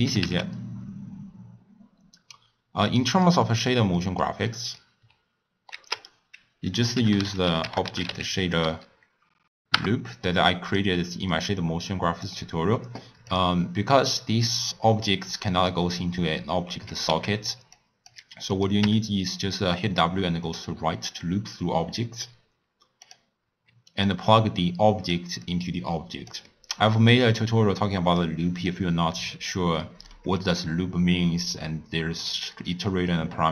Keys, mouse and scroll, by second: 0.1 g, 3.5-5.8 middle drag, 5.8 ctrl+a, 11.0-11.5 middle drag, 11.5-13.3 drag, 14.4-17.0 drag, 17.3 x, 17.7 click, 18.5 click, 18.8 w, 24.0-25.5 drag, 26.5-27.2 middle drag, 27.2 drag, 28.5 click, 29.2 click, 30.1 middle click, 30.5 click.